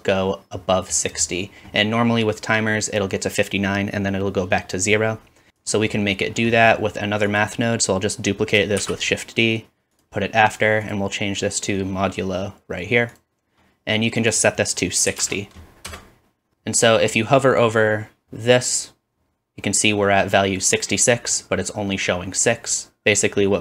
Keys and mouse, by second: 7.4 middle click, 8.8 shift+d, 10.5-23.6 drag.